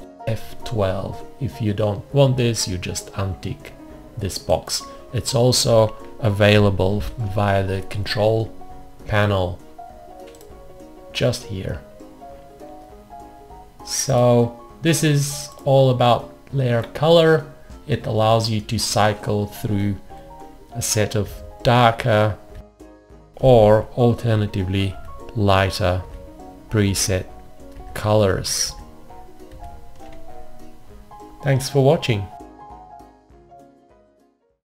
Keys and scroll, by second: 7.0 alt+F1, 20.3 F5, 21.2 F5, 22.6 F5, 25.0 alt+F5.